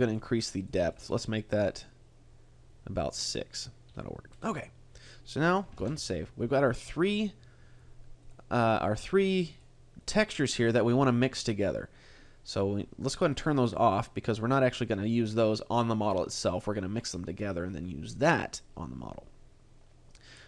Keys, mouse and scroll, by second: 0.0 click, 1.5 click, 3.9-5.1 scroll up 3, 5.1-5.8 scroll up 1, 5.8 ctrl+s, 8.2 click, 8.6 click, 9.2 click, 9.5 click, 10.0 click, 10.4 click, 10.6 click, 13.2 click, 13.6 click, 13.9 click.